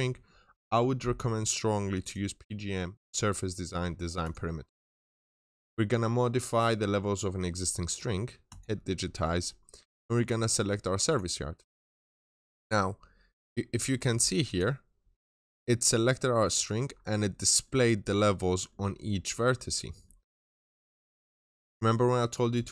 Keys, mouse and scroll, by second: 8.9 scroll up 1, 9.3 middle click, 9.8-10.9 scroll up 1, 10.9 click, 14.9 scroll down 1, 15.0 middle click, 15.4 scroll up 1, 15.8 scroll down 1, 16.0 middle click, 16.4 scroll up 1, 17.0 scroll down 1, 17.1 middle click, 17.6-18.4 scroll down 2, 17.8 middle click, 18.4 middle click.